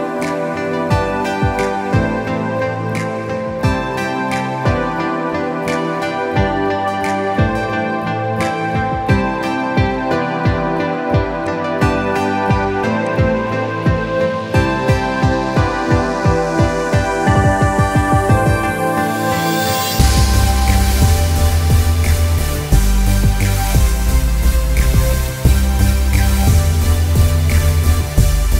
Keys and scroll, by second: 5.9 ctrl+-, 6.0 ctrl+-, 6.3 ctrl+=, 6.7 ctrl+=, 19.4 Delete.